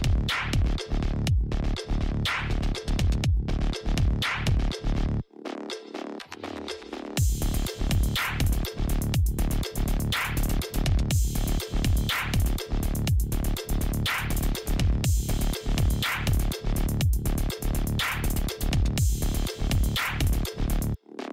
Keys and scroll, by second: 3.0 alt+i.